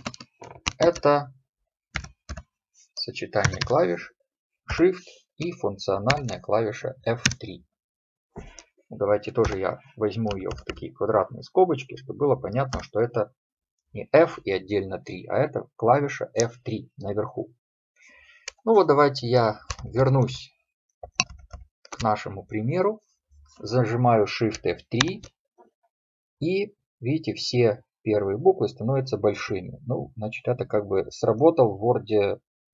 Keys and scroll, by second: 19.9 ctrl+Left, 25.1 shift+F3.